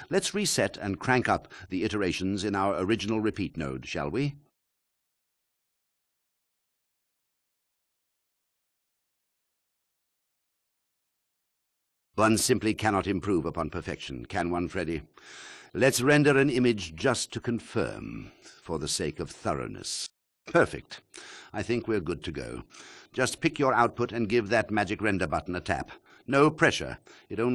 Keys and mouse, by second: 0.0 click, 0.4 click, 0.6 click, 1.9 m, 3.6 drag, 4.1 click, 6.5 space, 8.5 click, 10.2 click, 10.9 click, 14.5 ctrl+alt+click, 17.0 space, 17.7-21.3 drag, 22.9-25.7 drag, 26.5-27.5 drag.